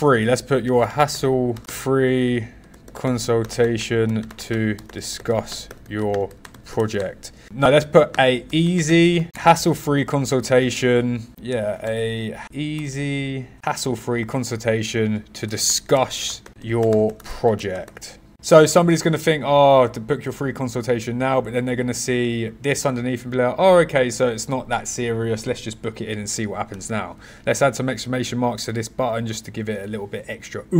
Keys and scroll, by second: 0.6 h, 7.4 a, 15.2-16.2 typing, 27.8 shift+1.